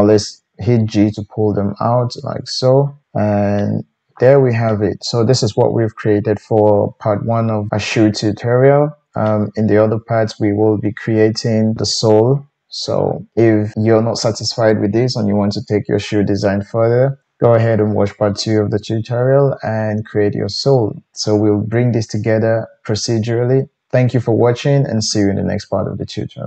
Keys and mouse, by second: 0.1 g, 5.0 Tab.